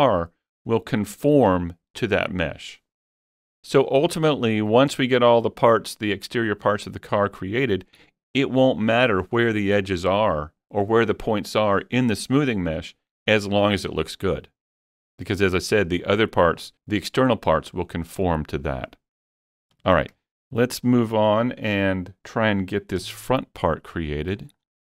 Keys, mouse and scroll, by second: 19.9 Tab, 20.2-22.2 middle drag, 20.9 scroll up 2, 23.0 KP_1, 24.1 shift+middle click, 24.7 scroll up 1.